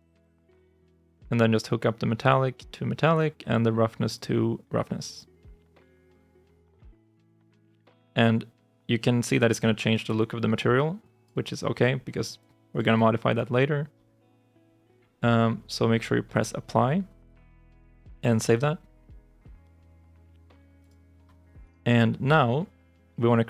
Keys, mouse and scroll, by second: 0.1 Return.